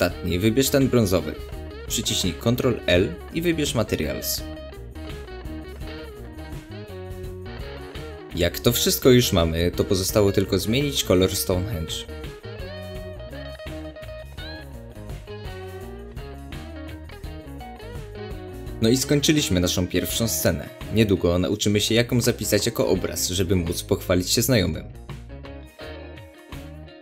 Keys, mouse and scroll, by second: 0.1 shift+click, 1.0 shift+click, 1.6 shift+click, 1.8-2.3 middle drag, 2.3 shift+click, 2.5-2.9 middle drag, 2.9 shift+click, 3.2 shift+click, 3.4 shift+drag, 3.6-4.1 middle drag, 4.1 shift+click, 4.4 shift+drag, 4.6-5.2 middle drag, 5.2 shift+click, 5.9 ctrl+l, 7.8 click, 9.8-11.3 middle drag, 9.8-10.2 scroll up 2, 11.3 click, 11.9 shift+click, 12.2 shift+drag, 12.3 shift+drag, 12.5 shift+drag, 12.6 shift+click, 12.7 middle click, 13.0 shift+drag, 13.1 shift+drag, 13.2 shift+drag, 13.3 shift+click, 13.4-13.7 middle drag, 13.7 shift+drag, 13.8 shift+drag, 14.1 shift+click, 14.1 middle drag, 14.4 shift+drag, 14.5 shift+drag, 14.6 click, 14.7 middle drag, 15.0 shift+drag, 15.1 shift+click, 15.2 shift+click, 15.3 shift+click, 15.4 shift+click, 15.5 shift+click, 15.7-16.3 middle drag, 16.3 shift+click, 16.8 ctrl+l, 17.7-18.2 middle drag, 18.2 click, 18.8 click, 20.7-21.1 scroll down 1, 21.1-27.0 middle drag, 22.2 scroll up 1, 24.9 scroll down 2.